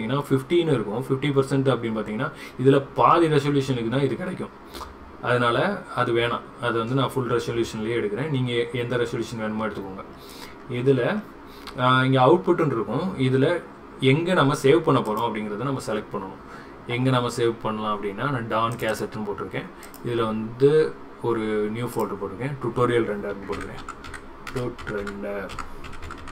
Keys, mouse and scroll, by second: 15.1 click.